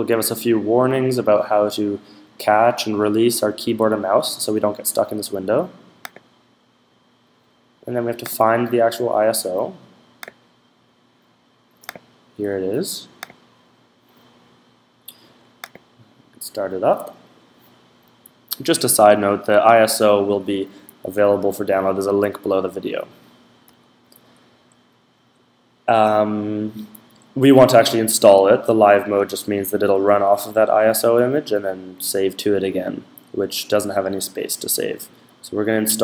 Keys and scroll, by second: 21.2 Down, 21.9 Up, 22.9 Down, 23.5 Down, 31.7 Up, 32.0 Down.